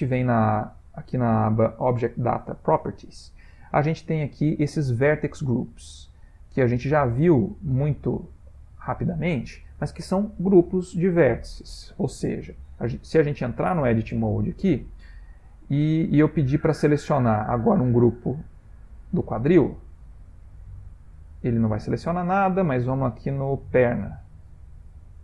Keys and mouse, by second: 6.9 click, 13.6 Tab, 14.6 a, 15.3 a, 15.9 a, 16.1 a, 17.4 click, 19.4 click, 20.8 click, 23.6 click, 25.0 click.